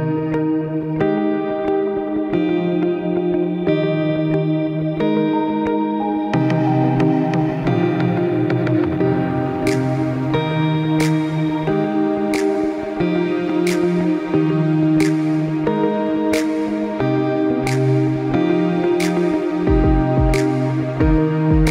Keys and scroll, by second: 0.3 ctrl+space, 21.0 space.